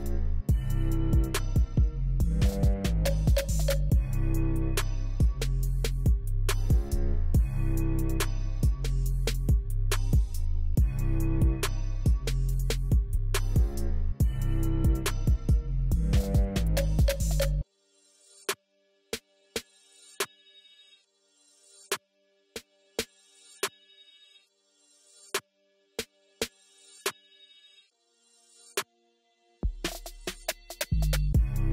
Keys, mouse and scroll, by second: 8.9 Delete, 23.5 click.